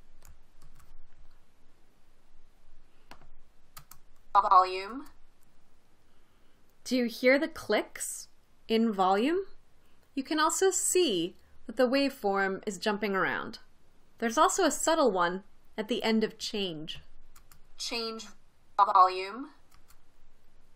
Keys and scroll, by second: 1.0 super+v, 4.2 space, 5.3 space, 17.8 space, 20.2 space.